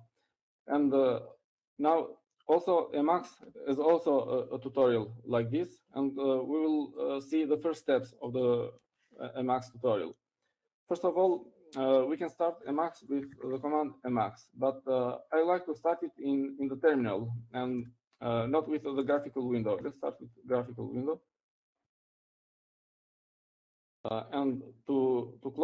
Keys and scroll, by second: 0.0-0.6 typing, 16.4 typing, 20.4 typing, 21.8 typing, 24.9 typing.